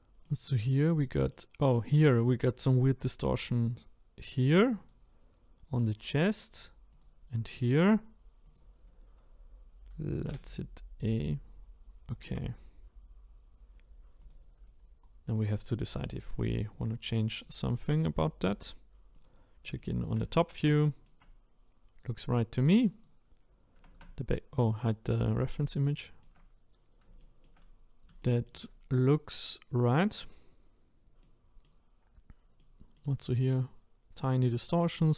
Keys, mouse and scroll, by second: 0.2-1.8 middle drag, 1.8 click, 4.4 click, 5.8-7.0 middle drag, 7.0 click, 8.5 click, 10.3 a, 14.3 click, 14.8 scroll down 1, 15.4-19.2 middle drag, 19.2 click, 19.8 shift+middle click, 20.2-20.7 scroll up 5, 20.7-23.0 shift+middle drag, 23.0 click, 25.2 click, 25.8 shift+middle click, 26.7 scroll down 1, 27.2-29.3 shift+middle drag, 29.3-29.8 scroll up 1, 29.8 middle click, 30.7-31.2 scroll down 1, 31.2-35.1 middle drag.